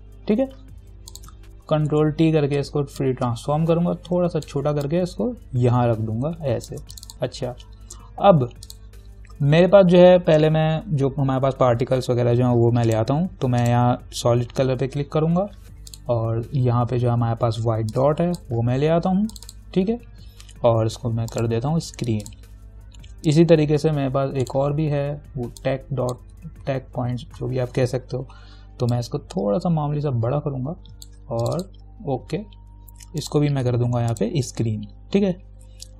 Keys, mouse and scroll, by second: 0.0-0.5 typing, 1.3 click, 2.1 ctrl+t, 3.2-5.1 alt+drag, 5.1-8.9 shift+drag, 13.1 click, 16.1 click, 17.0-18.1 scroll down 2, 18.1-19.6 drag, 25.4-25.9 scroll down 1, 25.9-29.1 drag, 29.1-31.6 alt+drag.